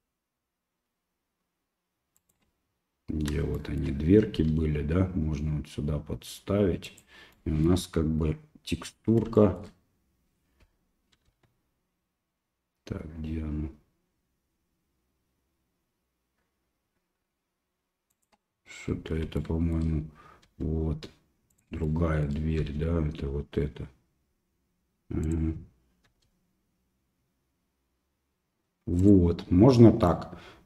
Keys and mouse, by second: 3.6 shift+middle click, 4.4 g, 7.4 middle click, 9.4 shift+middle click, 11.3 g, 19.5 shift+middle click, 20.5 g, 21.8 shift+middle click, 22.6 g, 26.1 g, 30.1 middle click.